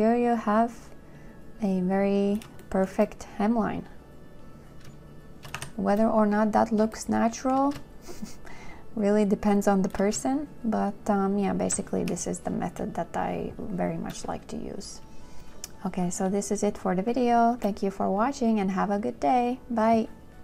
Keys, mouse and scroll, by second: 6.0 2, 7.2 shift+click, 12.3 2.